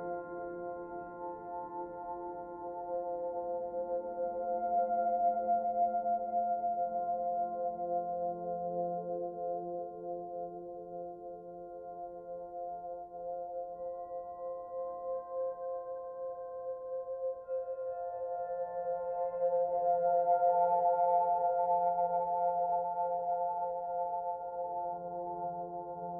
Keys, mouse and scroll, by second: 0.8 click, 1.8 click, 3.2 click, 9.3 middle click, 10.5 click, 11.0 click, 12.2 middle click, 15.1 click, 16.8 e, 19.0 click, 22.4 click, 24.0 click, 25.7 middle click.